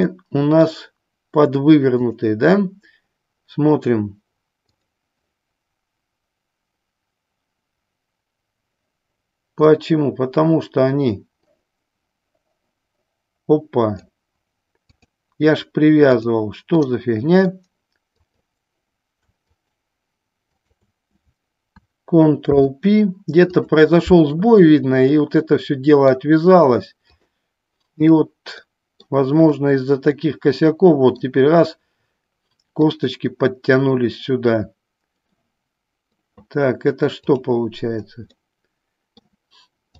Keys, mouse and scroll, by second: 0.2 middle click, 2.2 click, 4.8-7.5 drag, 9.7-14.2 drag, 15.1-16.5 drag, 17.0 middle click, 18.5 click, 19.7 shift+click, 20.6 shift+click, 22.6 ctrl+p, 25.3-26.4 middle drag, 27.3-28.4 drag, 28.8 middle click, 30.2-31.4 middle drag, 32.9-35.7 drag, 35.7 middle click, 37.4 click, 38.5 middle click.